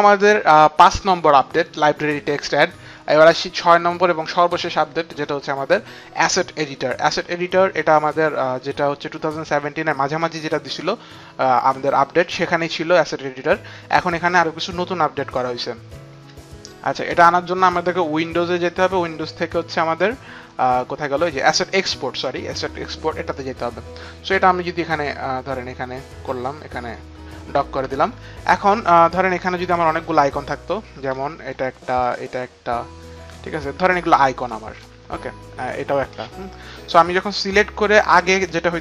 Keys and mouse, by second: 10.0 click, 15.9 click, 18.1 click, 22.1 click, 23.2 click, 31.1 alt+click, 31.9 alt+click, 33.9 alt+click, 36.8 alt+click.